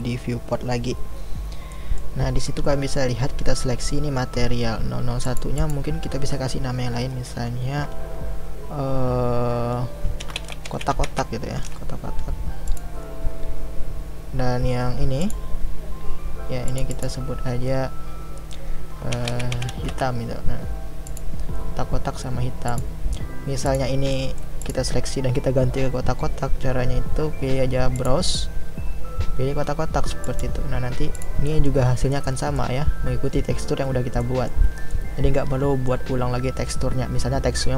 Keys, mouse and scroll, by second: 5.2 click, 15.3 click, 16.7 click, 21.0-22.8 drag, 23.7 click, 24.2-24.7 middle drag, 24.7 click, 30.4 click, 31.4-32.1 middle drag, 32.1-32.6 scroll down 1, 32.6-37.7 middle drag.